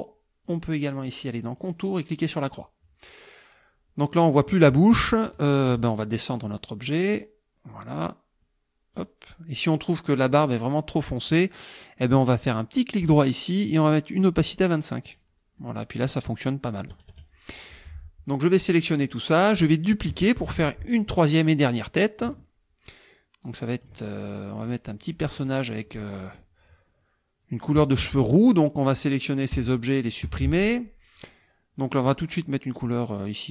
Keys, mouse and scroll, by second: 0.5 click, 1.6 click, 2.3 click, 6.4 click, 7.1 click, 7.7 click, 9.0 click, 13.0 right click, 14.5 click, 15.2 click, 16.9 KP_Subtract, 18.3-19.3 drag, 20.4 ctrl+d, 22.0-24.0 drag, 24.1 ctrl+click, 25.0 click, 28.1 click, 28.9 click, 29.6 Delete, 30.1 click, 30.2 Delete, 31.0 click.